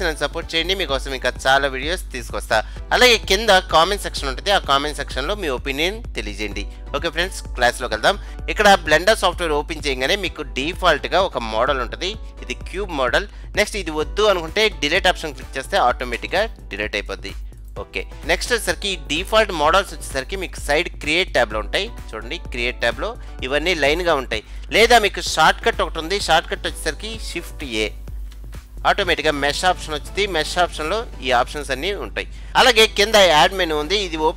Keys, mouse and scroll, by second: 1.6 click, 4.1-7.0 drag, 11.7-15.7 middle drag, 16.3 Delete, 21.7-23.5 drag, 28.3 shift+a, 32.5 click.